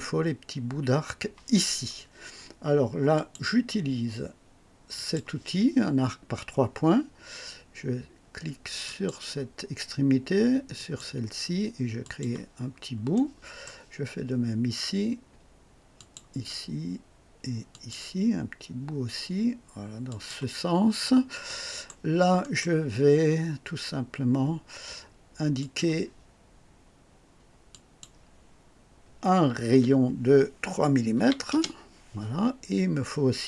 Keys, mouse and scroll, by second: 3.1 click, 4.9 click, 6.0 scroll up 1, 8.8 click, 10.7 click, 12.0 click, 12.7-13.0 scroll down 1, 13.1 right click, 15.9 click, 17.7 click, 20.1 click, 21.5 right click, 22.4 right click, 25.6 click, 27.7 click, 29.7 r, 31.1 KP_3, 31.5 Return, 31.7 KP_Enter.